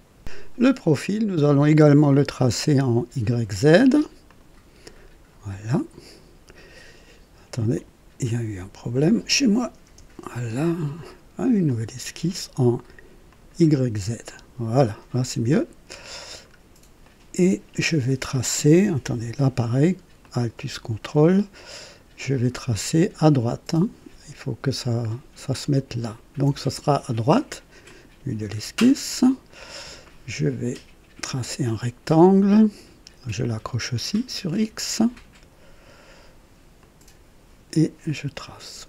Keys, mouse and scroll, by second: 2.0 click, 4.2 click, 5.7 click, 7.7 click, 9.8 Delete, 11.6 click, 13.2 click, 14.3 click, 15.5 right click, 16.4 scroll up 1, 17.0 right click, 20.2-22.0 ctrl+alt+drag, 26.0 ctrl+alt+click, 27.8 click, 28.9 right click, 31.2 click, 36.7 click, 38.4 click.